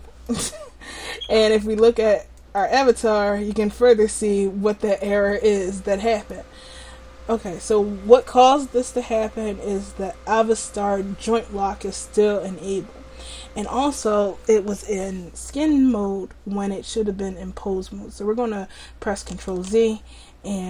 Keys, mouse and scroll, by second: 2.4-5.3 drag, 19.4 ctrl+alt+z.